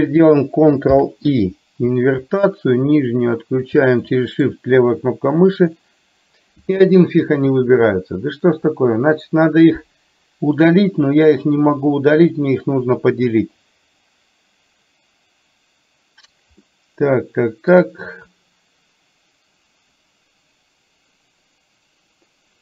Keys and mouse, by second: 0.9 ctrl+i, 2.9 shift+click, 4.0 middle click, 16.8-17.8 middle drag.